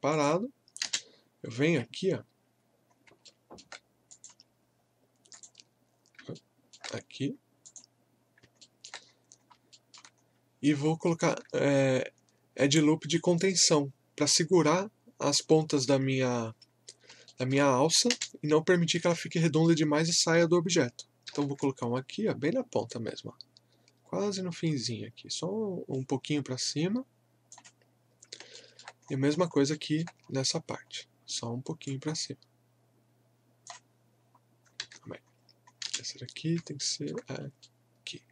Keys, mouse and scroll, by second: 0.1 click, 0.8 space, 2.9 scroll up 1, 3.2 alt+middle click, 4.1 click, 6.4 alt+middle click, 7.6 click, 7.7 click, 8.2 scroll down 1, 8.6 alt+middle click, 9.1-9.4 scroll up 1, 9.8 alt+middle click, 10.2-10.7 scroll up 1, 11.1 alt+middle click, 16.4 scroll up 1, 17.3 alt+middle click, 17.7-18.1 scroll up 1, 18.1 space, 19.4 alt+middle click, 21.3 ctrl+r, 22.9-28.0 drag, 28.0 scroll down 1, 28.6 alt+middle click, 29.0 scroll up 1, 29.7-30.4 alt+scroll up 2, 31.9-34.2 drag, 34.2-34.6 scroll down 1, 34.8 ctrl+z, 35.3 scroll up 1, 35.8 space, 36.8 alt+middle click, 37.3 alt+scroll up 1, 37.3 typing, 37.6-38.3 alt+middle drag.